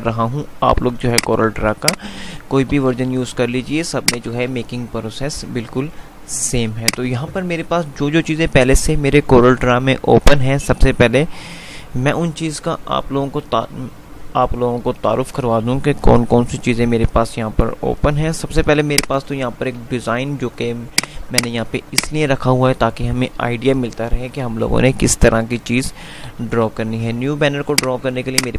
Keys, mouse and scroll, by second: 1.2 F2, 3.0 F3, 3.7 F2, 5.2 F3, 6.7 click, 7.0 F2, 7.7 F3, 18.3 F2, 19.0 click, 19.2 F2, 21.0 click, 26.5 F3, 27.8 F2.